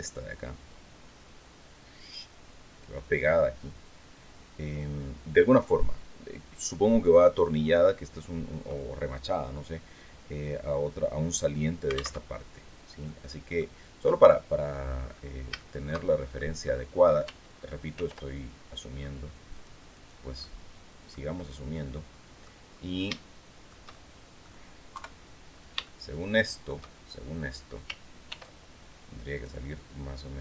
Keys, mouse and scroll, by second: 11.7 alt+Tab, 12.5 click, 13.5 click, 14.5 scroll up 2, 15.1 shift+middle click, 16.1 shift+scroll up 3, 17.4 ctrl+r, 18.5 scroll up 2, 19.0 click, 19.4 click, 19.9 click, 20.9-22.1 drag, 22.6 shift+click, 23.4 shift+click, 24.4 KP_3, 25.3-26.4 shift+drag, 27.8 ctrl+r, 28.8 click.